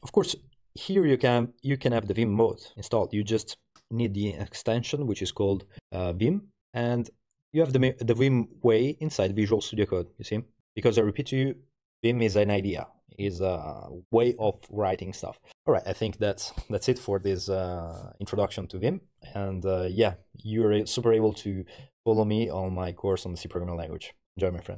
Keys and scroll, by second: 5.9 shift+v.